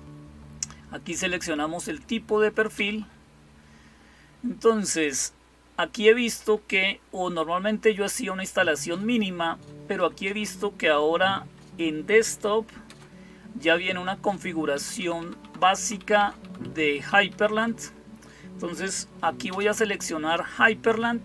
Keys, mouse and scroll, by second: 2.6 Return, 8.0 Down, 9.8 Up, 12.7 Return, 14.6 Down, 14.8 Down, 15.0 Down, 15.3 Down, 15.4 Down, 15.8 Down, 16.0 Down, 16.2 Down, 16.5 Down, 16.9 Up, 17.1 Up, 19.3 space.